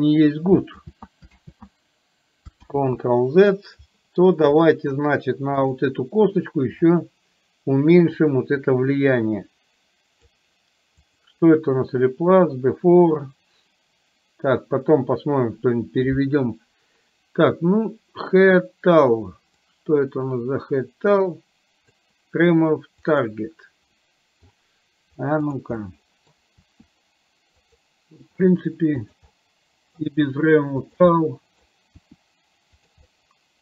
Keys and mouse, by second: 0.9 ctrl+z, 1.5 ctrl+z, 4.8 middle click, 8.4-10.4 drag, 11.1 click, 19.8-22.1 drag, 23.3 click, 24.1 middle click, 25.6 drag, 25.9-26.5 middle drag, 26.8 r, 28.4 g, 29.4 middle click, 30.3 g, 31.3 middle click, 32.0 r, 33.1-33.6 middle drag.